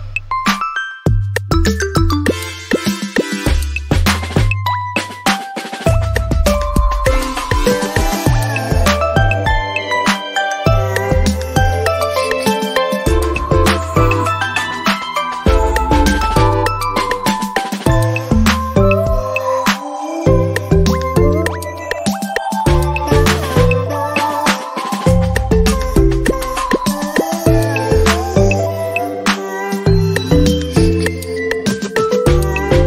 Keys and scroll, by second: 26.0 ctrl+alt+z.